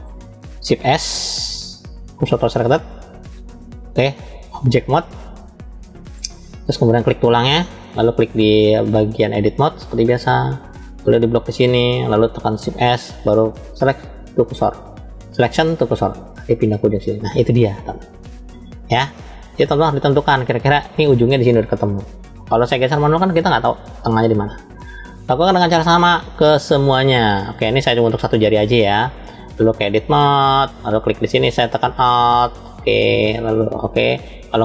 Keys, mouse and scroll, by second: 0.7 shift+s, 4.2-7.0 drag, 9.1-9.9 drag, 10.5 click, 12.6 shift+s, 19.1-20.7 middle drag, 25.3-26.2 drag, 27.1 click, 28.9-29.9 drag, 32.2 alt+click.